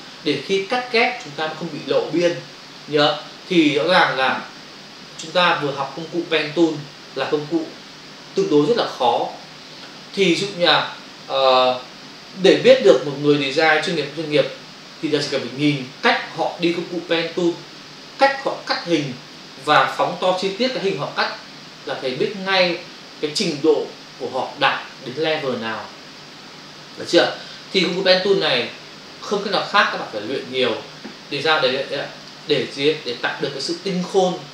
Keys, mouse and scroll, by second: 32.2 ctrl+click, 32.7 click.